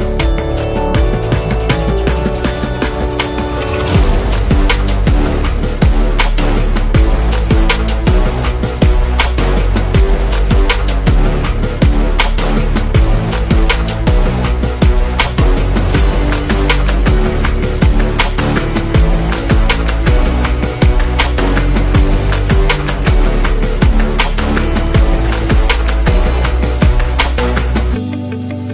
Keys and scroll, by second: 0.0-0.1 typing, 4.5-5.0 typing, 8.2-8.7 typing, 13.0-14.5 typing, 15.2 Return, 16.4 a, 18.3 Page_Down, 20.9 super+0, 22.0-23.2 typing, 27.5 super+z.